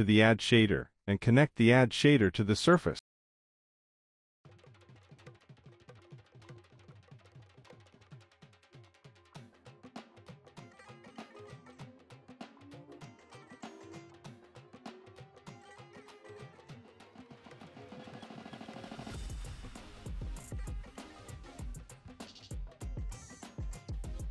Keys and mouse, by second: 0.1 middle click, 6.4 middle click, 7.7 click, 9.3 middle click, 10.3-11.3 drag, 12.0 middle click, 12.4 middle click, 12.9 middle click, 13.1 middle click, 13.7-16.8 drag, 18.2 click, 19.3 middle click, 19.8 middle click, 20.0 click, 20.4 click, 23.1 click.